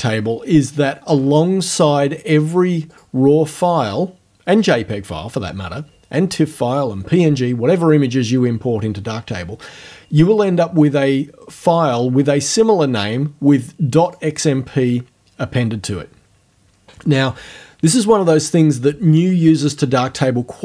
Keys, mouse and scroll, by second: 2.9 click, 14.1 click.